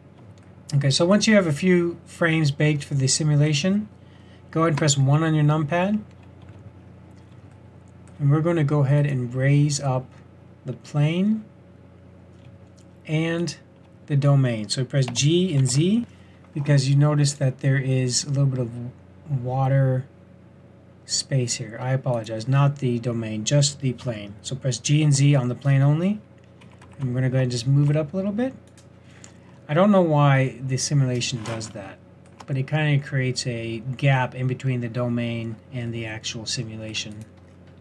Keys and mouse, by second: 4.7 KP_1, 6.4 z, 15.0 g, 22.1-24.0 drag, 24.0 g, 29.2-35.0 middle drag, 35.9-36.2 middle drag, 36.3-36.6 middle drag, 37.2-37.8 middle drag.